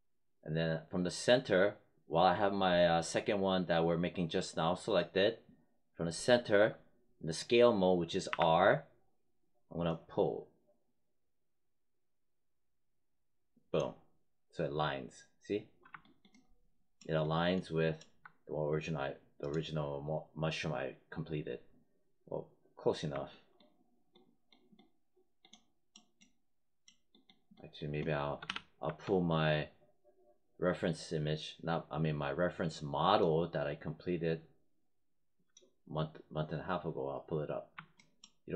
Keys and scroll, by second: 8.2 r, 28.4 w.